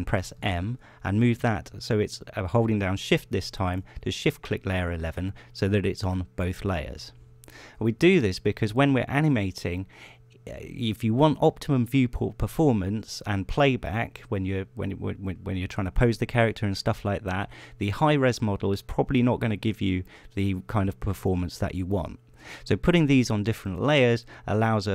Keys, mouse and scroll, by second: 1.0 m, 4.3 shift+click, 18.8 right click, 24.7 click.